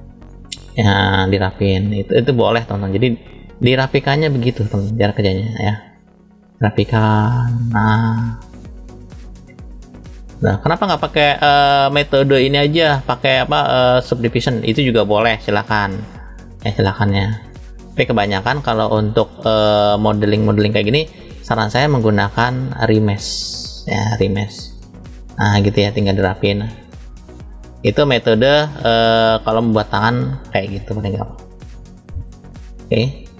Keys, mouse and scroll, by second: 0.5 click, 4.1 middle click, 5.4 middle click, 6.7 click, 8.0-8.3 scroll down 1, 8.3 middle click, 9.3 click, 11.1 click, 11.6-13.5 drag, 14.7 middle click, 16.0 click, 17.5 click, 18.7 middle click, 20.2-20.6 scroll up 2, 20.9 shift+middle click, 22.1 click, 24.0 middle click, 25.4 click, 26.5 click, 28.4 middle click, 29.5 shift+middle click, 30.7 click, 33.0 middle click.